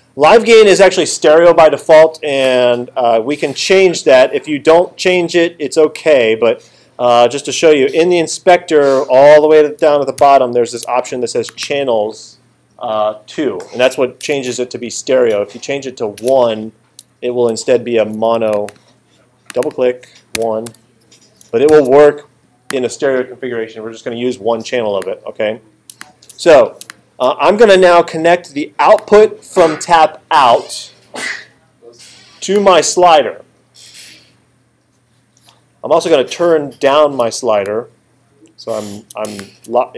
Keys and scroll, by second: 10.2 alt+super+8, 16.2 1, 17.5 Return, 20.4 1, 20.7 Return, 21.5 alt+super+Return, 21.7 alt+super+8.